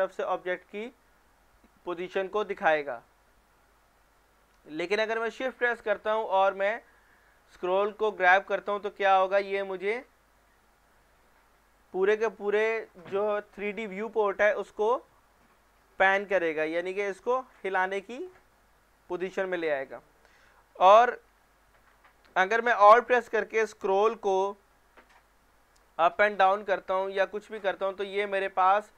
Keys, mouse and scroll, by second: 3.7 middle click, 4.2-7.0 shift+middle drag, 17.7-19.6 shift+middle drag, 24.5-28.9 middle drag.